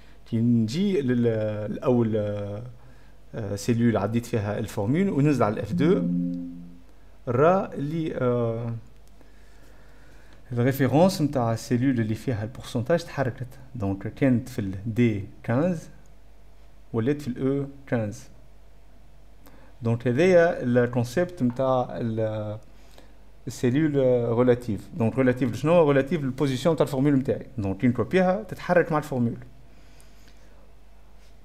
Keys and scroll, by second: 5.0 F1, 5.0 F2, 5.1 F3, 6.0 F2.